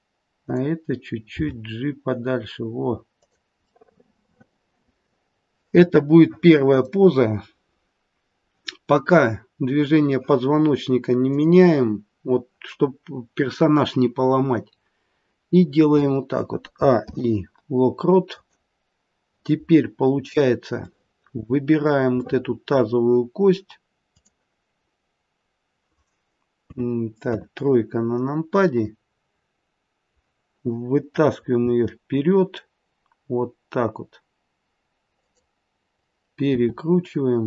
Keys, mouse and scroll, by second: 0.3 click, 1.5 g, 3.9 middle click, 11.2 click, 16.7 a, 17.0 i, 21.1 middle click, 21.2 middle click, 21.4 middle click, 22.2 middle click, 24.0 click, 26.6 KP_2, 31.6 g, 36.4 r.